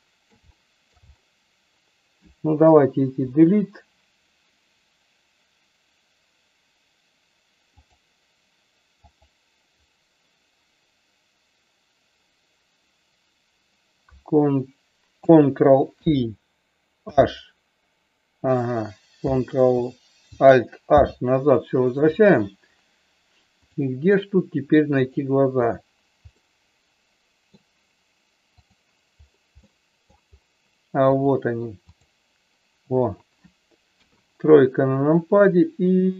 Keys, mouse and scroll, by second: 0.6 shift+middle click, 3.2 Delete, 8.9 click, 16.0 ctrl+i, 17.1 h, 20.9 alt+h, 23.6 click, 24.9 click, 25.6 click, 26.4-27.6 middle drag, 29.7 middle click, 31.2 click, 31.8 click, 33.9 KP_3, 35.1-36.1 drag.